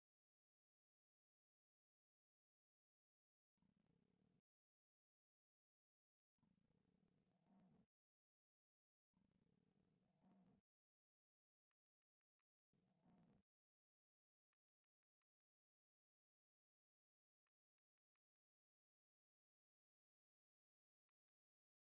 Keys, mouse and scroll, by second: 0.7 z, 1.4 a, 1.7 middle click, 2.9 c, 3.3 right click, 3.8 1, 4.4 z, 4.9 middle click, 6.0 click, 6.9-7.9 drag, 8.5 ctrl+x, 8.5 ctrl+z, 11.2 click, 13.1 f, 14.7 click, 15.3 click, 16.4 x, 17.5 click, 17.9 x.